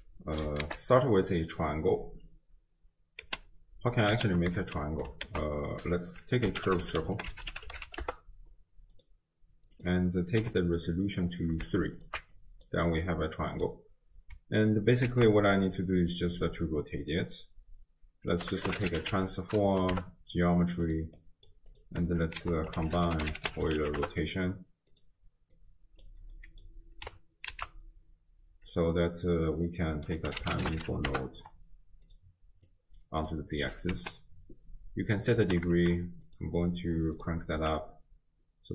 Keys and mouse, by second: 0.7 shift+a, 3.2 space, 4.2 space, 5.5 ctrl+a, 9.8 click, 12.0 alt+shift+click, 12.4 click, 13.0-13.7 middle drag, 15.1 ctrl+a, 21.2 middle click, 21.7 click, 22.4 ctrl+a, 25.6 click, 26.4 middle click, 27.6 ctrl+a, 32.8-33.3 drag, 33.9 space, 35.4 space, 36.3 click, 37.2 click, 38.5 space.